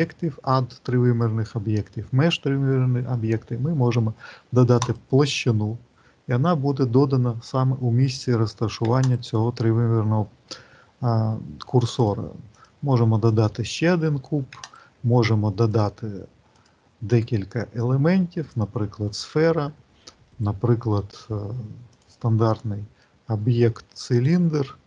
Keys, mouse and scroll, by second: 8.9 shift+right click, 11.9 click, 14.5 shift+right click, 15.5 click, 20.2 shift+right click, 21.8 click.